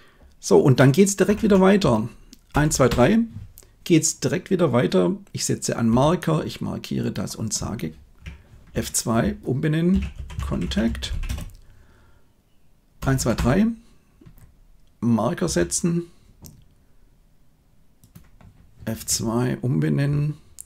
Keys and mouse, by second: 1.2 Left, 1.4 Left, 1.7 Right, 2.4 Right, 2.6 Right, 2.8 Right, 5.8 m, 6.9 click, 8.6 F2, 12.9 Right, 13.1 Right, 13.3 Right, 15.4 m, 17.9 click, 18.8 F2.